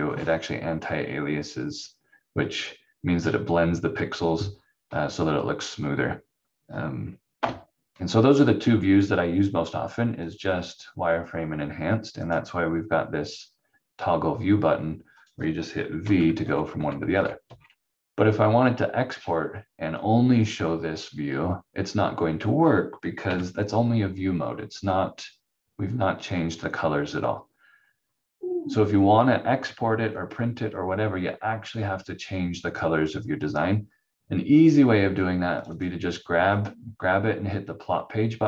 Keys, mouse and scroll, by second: 7.3 F4, 10.2 click, 16.0 v, 16.4 v, 17.0 v, 17.4 v, 23.2 v, 35.6 click.